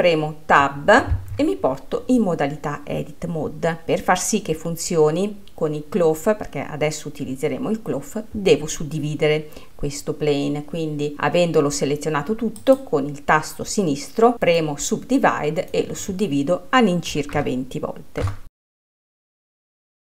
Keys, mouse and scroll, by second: 12.6-15.2 drag.